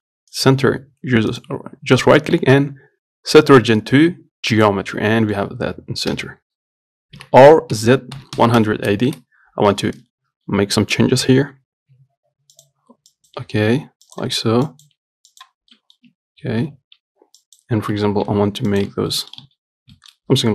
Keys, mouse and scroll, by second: 5.4-6.4 middle drag, 6.4 KP_7, 7.4 r, 10.0 Tab, 10.7 z, 11.2-12.2 drag, 12.2 g, 13.4 click, 13.7 g, 14.9 click, 15.2 g, 16.0 middle click, 16.3 Tab, 16.9 Tab, 17.7 Left, 18.5 g, 19.1 Tab, 19.4 middle click, 19.7 z, 20.0 scroll down 1, 20.2 shift+middle click.